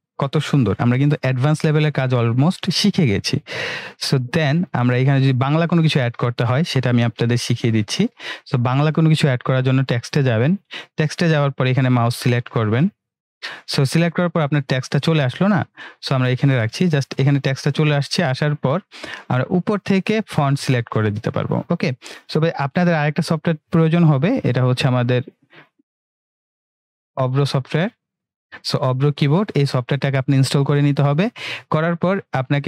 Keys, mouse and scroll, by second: 1.0 ctrl+-, 3.3 ctrl+=, 4.6 ctrl+=, 5.5 ctrl+=, 10.2 click, 12.7-17.1 drag, 20.0 click, 22.3 click, 25.5 click.